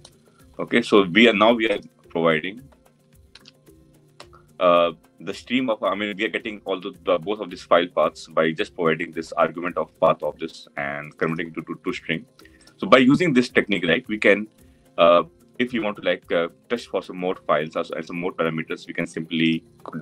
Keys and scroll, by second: 3.0 ctrl+alt+l.